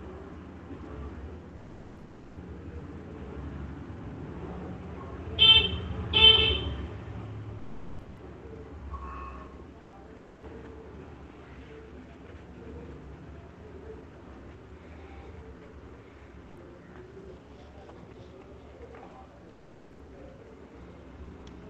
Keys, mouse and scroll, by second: 0.4 click, 1.3 click, 1.8 click, 2.2 click, 2.9 click, 3.5 click, 3.9 click, 4.1 click, 5.3 click, 5.7 click, 7.4 click, 9.2 middle click, 10.0 click, 10.4 click, 10.8 click, 15.5 shift+click, 17.1 alt+click, 19.1 right click, 20.5 shift+click.